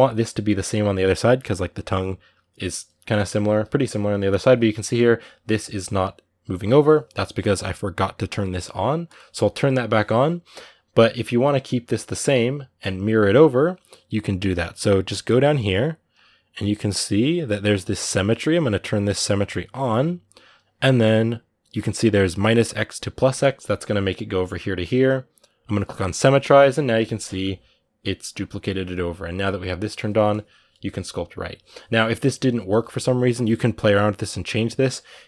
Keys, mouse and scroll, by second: 0.3-3.3 middle drag, 3.3 ctrl+z, 4.1-5.6 drag, 5.6-8.8 middle drag, 8.8-26.6 drag, 26.6-30.1 middle drag, 30.1-34.9 drag, 34.9-35.2 ctrl+middle drag.